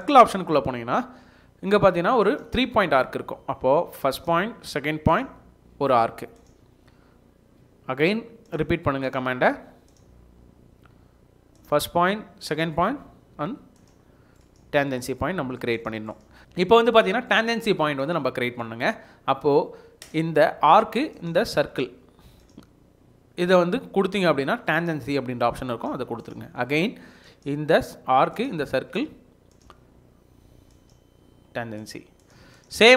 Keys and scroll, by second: 14.2 Escape, 16.4 Escape.